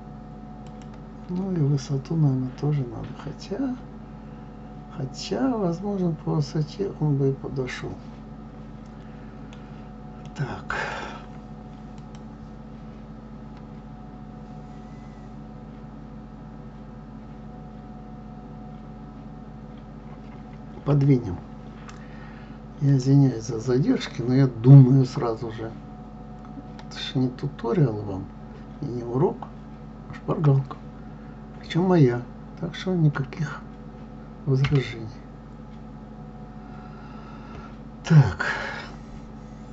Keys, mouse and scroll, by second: 1.6-4.9 middle drag, 10.2-11.8 middle drag, 11.8 click, 20.8 KP_3, 22.9 click, 34.6 g.